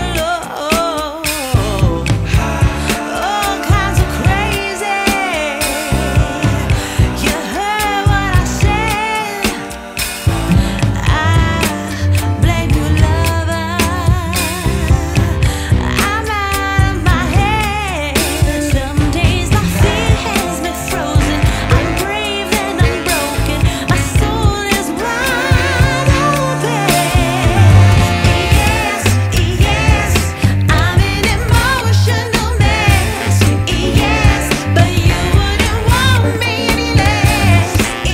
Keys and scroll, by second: 9.2 ctrl+Page_Down, 12.3 ctrl+Page_Up, 15.5 F2, 18.3 F3, 22.7 ctrl+z, 23.2 F3, 23.5 Escape, 25.7 F4, 28.6 F2, 32.2 F8, 32.4 BackSpace, 33.7-35.1 typing, 35.2 ctrl+space.